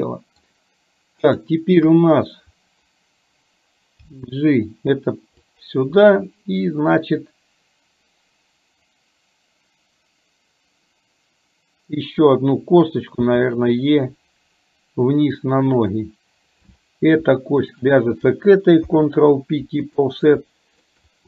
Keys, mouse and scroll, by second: 2.0 KP_1, 4.2 g, 13.2 e, 16.7 click, 17.6 shift+click, 18.9 ctrl+p, 20.6 shift+middle click.